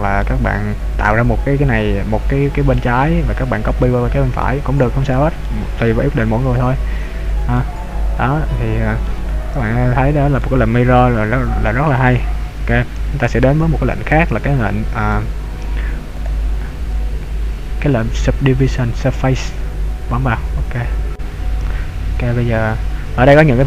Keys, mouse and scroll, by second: 2.9 middle click, 3.7 middle click, 5.1 right click, 5.4 middle click, 6.6 click, 7.8 middle click, 9.8 ctrl+z, 10.4 middle click, 13.0 a, 15.2 a, 16.2 click, 22.6 click, 23.2 click.